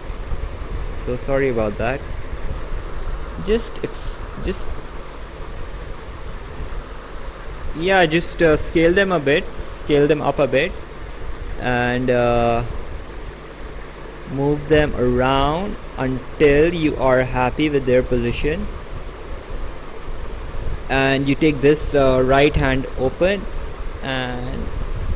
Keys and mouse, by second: 10.2 click, 12.6 click, 15.9 click, 21.4 click, 23.0 click.